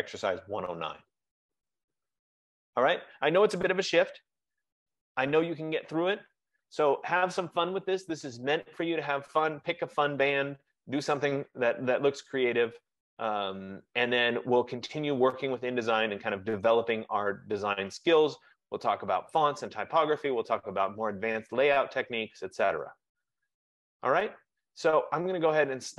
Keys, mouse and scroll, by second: 3.2 F15.